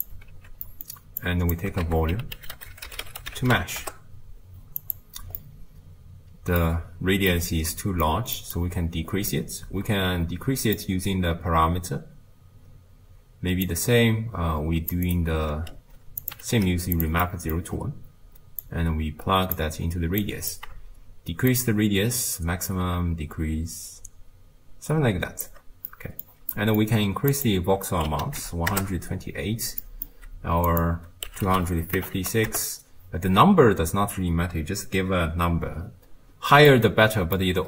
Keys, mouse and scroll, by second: 0.4 ctrl+x, 1.2-3.8 drag, 3.8 ctrl+a, 7.3-13.7 middle drag, 13.7-15.0 drag, 16.2 click, 16.5 ctrl+shift+d, 19.7 click, 21.8-24.5 shift+drag, 25.9-28.8 middle drag, 28.8-37.6 drag.